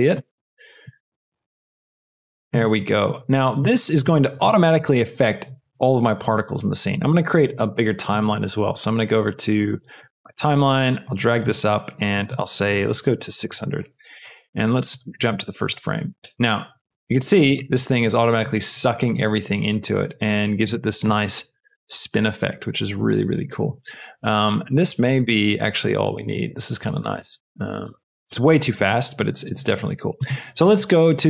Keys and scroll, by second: 1.5 s, 13.1 KP_6, 13.3 KP_0, 13.4 Return, 16.2 shift+space.